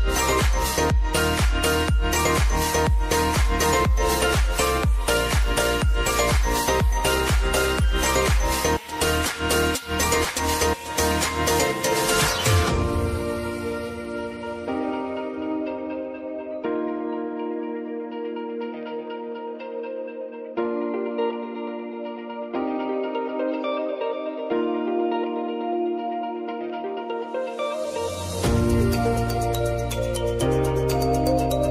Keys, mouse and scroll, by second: 0.5 shift+n, 2.6 click, 3.9 ctrl+a, 4.6 shift+n, 6.1-11.0 drag, 11.0 space, 14.9-28.1 drag, 28.5 ctrl+d, 29.7-31.6 drag.